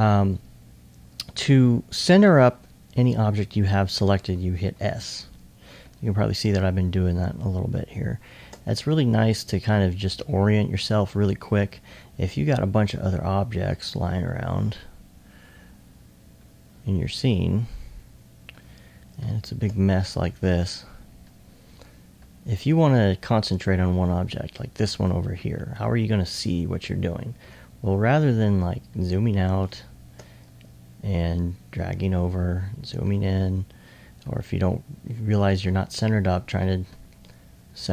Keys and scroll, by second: 1.4 2, 1.8 2, 2.5 1, 5.0 s, 5.8 alt+s, 18.5 2, 19.8 alt+2, 20.8 alt+1, 21.4-22.2 typing, 30.4 2, 31.6-32.6 typing, 33.8 2, 34.2 1, 37.4-37.9 typing.